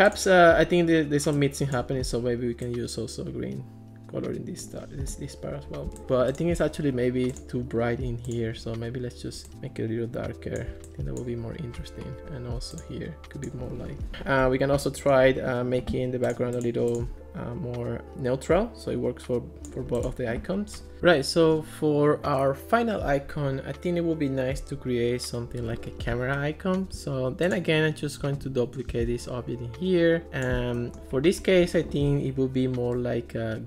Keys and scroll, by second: 13.9 alt+r, 14.1 alt+r, 28.9 super+d.